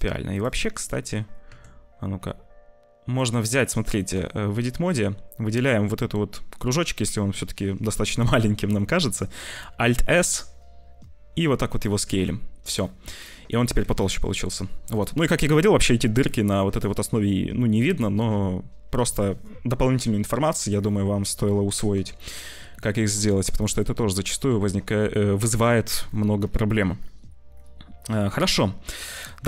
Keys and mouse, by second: 0.6 shift+middle click, 1.4 Tab, 2.1 alt+s, 4.0 shift+middle click, 9.4 alt+s, 12.0 Tab, 13.1 click, 13.8 ctrl+s, 16.6 click, 22.2 shift+middle click, 23.1 ctrl+s, 23.6 shift+middle click, 24.5 ctrl+s, 26.5 ctrl+s.